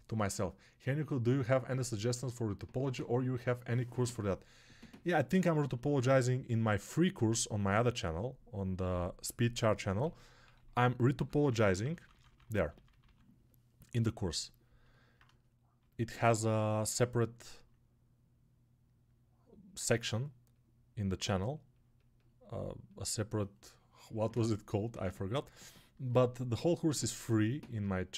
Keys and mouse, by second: 16.9-28.1 alt+drag.